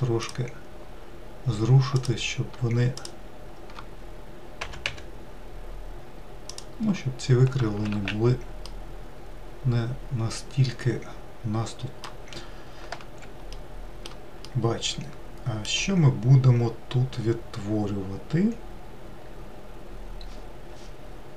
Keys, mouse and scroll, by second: 1.9 click, 2.9 shift+click, 4.6 g, 7.9 alt+z, 8.6-11.7 middle drag, 13.5-17.5 shift+middle drag.